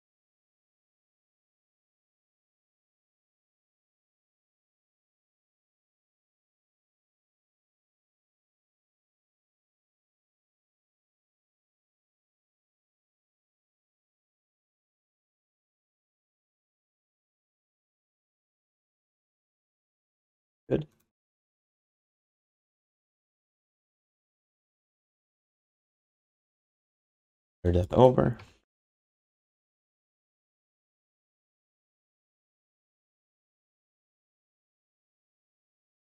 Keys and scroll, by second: 14.9 w, 23.5-24.4 typing, 27.2 ctrl+shift+d, 28.2 q, 32.0 w, 35.2 alt+shift+d, 35.5 ctrl+s.